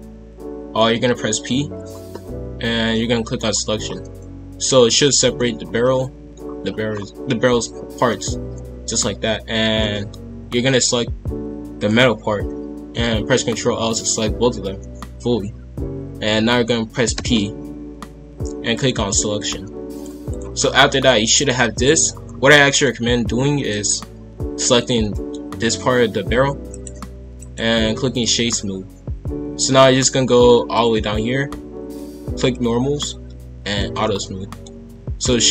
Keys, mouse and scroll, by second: 0.0-1.0 scroll up 1, 1.0 p, 3.8-4.1 scroll down 2, 4.1-6.4 middle drag, 6.4-6.9 scroll down 1, 6.9-8.1 scroll up 1, 9.8 middle click, 10.6 click, 11.7 shift+click, 13.3 ctrl+l, 19.9 click, 20.5 scroll down 1, 20.8-21.7 middle drag, 21.7 click, 22.2-23.6 middle drag, 23.6-25.1 right drag, 25.1-25.6 middle drag, 25.6 g, 27.4-30.4 right drag, 30.7 click, 32.4 click, 34.2-34.9 middle drag, 34.9 scroll down 1, 35.0-35.5 middle drag.